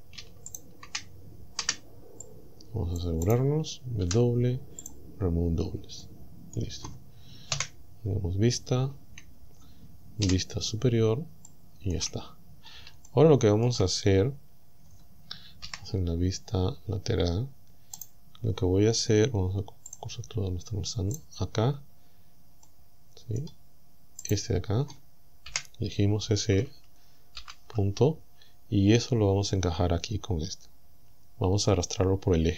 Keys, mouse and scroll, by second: 0.5 alt+shift+right click, 1.7 c, 2.3 click, 3.3 right click, 4.1 w, 4.9 click, 6.0 middle click, 6.9 scroll up 2, 7.6 KP_1, 9.3-9.7 shift+scroll down 2, 10.3 shift+KP_7, 11.5 shift+middle click, 12.3-12.8 shift+scroll up 3, 13.1 shift+middle click, 14.1-14.5 shift+scroll up 3, 14.5 scroll down 2, 15.7 KP_1, 18.0 right click, 19.9 click, 21.2 right click, 22.7 middle click, 24.3 right click, 25.5 KP_1, 27.4 ctrl+l, 29.7-30.2 scroll up 2, 30.3 scroll down 2, 31.1-31.4 scroll down 2, 31.7-32.0 scroll up 2.